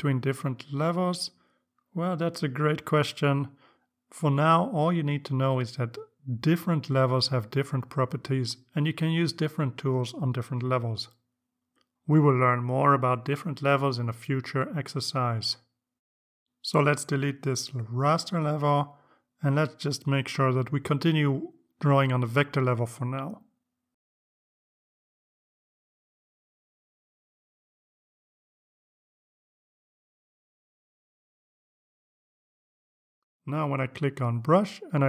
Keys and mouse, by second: 11.6 click, 17.9 click, 19.9 right click, 21.9 click, 23.3 click, 25.8 click, 26.5 right click, 29.2 click, 34.8 click.